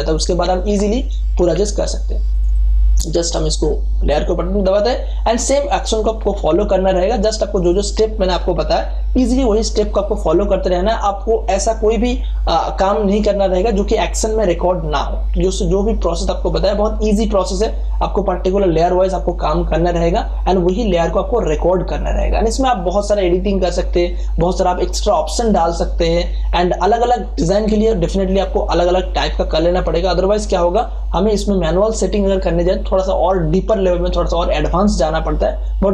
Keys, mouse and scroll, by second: 1.5 F12, 2.3 click, 7.1-18.5 drag, 18.5-28.5 drag.